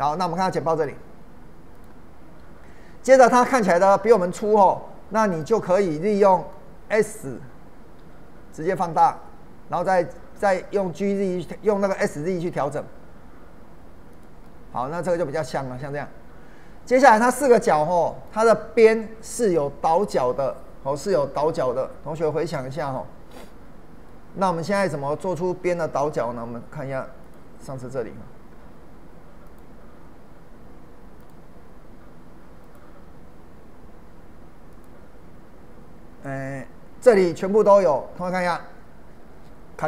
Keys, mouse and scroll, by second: 1.8 click, 5.3 click, 6.2-8.0 middle drag, 8.0 s, 10.4 click, 12.0 s, 12.5 z, 14.1 click, 14.5-20.7 middle drag, 22.9-24.7 middle drag, 24.7-25.5 scroll up 1, 27.2 click, 29.4 click, 31.5 scroll up 1, 32.6 click, 34.2 scroll up 1, 34.7 click.